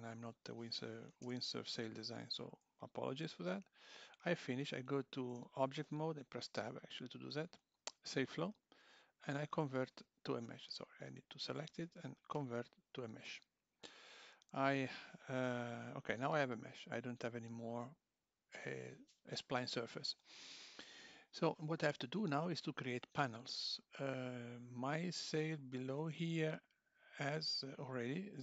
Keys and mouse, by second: 5.3 Tab, 7.6 click, 16.1 Tab, 24.5 Tab, 24.8 click, 26.0 z.